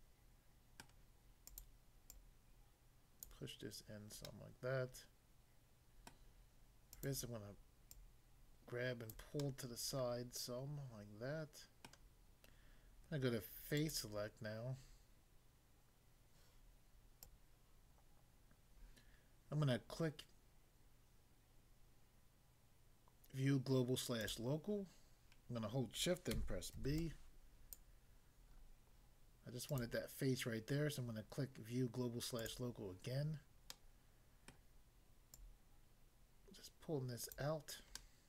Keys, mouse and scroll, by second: 0.8 middle click, 1.5 click, 2.1 click, 3.3 click, 4.3 middle click, 6.1 middle click, 6.9 click, 7.9 click, 9.1 click, 9.4 middle click, 11.9 middle click, 13.8 click, 17.2 click, 17.3 click, 24.2 click, 26.8 b, 27.0 click, 27.8 click, 28.5 scroll up 1, 29.6 click, 32.4 click, 33.8 middle click, 34.5 middle click, 35.4 click, 37.3 click, 38.0 middle click.